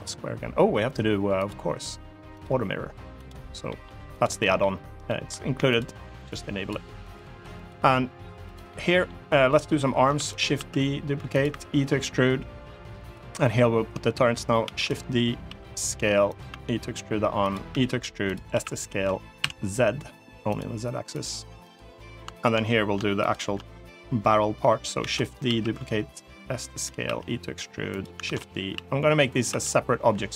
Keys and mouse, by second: 2.2 click, 3.5 middle click, 4.0 click, 4.2 middle click, 4.8 middle click, 5.5 click, 6.1 click, 6.8 click, 7.3 click, 8.2 click, 8.5 middle click, 9.9 shift+d, 10.1 right click, 10.3 s, 11.1 click, 11.3 e, 12.8 click, 14.4 shift+d, 14.7 click, 15.2 s, 16.0 click, 16.3 e, 17.2 click, 17.5 e, 18.0 click, 18.3 s, 19.2 z, 20.3 click, 20.9 click, 21.4 click, 22.2 shift+click, 24.8 shift+d, 24.9 right click, 25.2 s, 26.5 click, 26.8 e, 27.7 click, 28.0 shift+d, 28.2 click, 28.5 s, 29.1 click, 29.3 e.